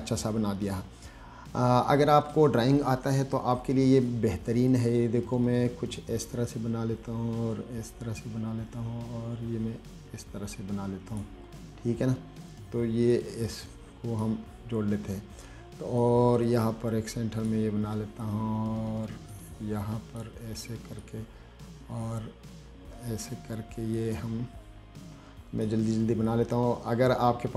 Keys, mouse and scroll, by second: 4.3-11.5 drag, 13.4-14.5 drag, 16.3-17.7 drag, 18.5-20.4 drag, 21.3-23.5 drag, 24.2-25.9 drag, 26.5-27.5 drag.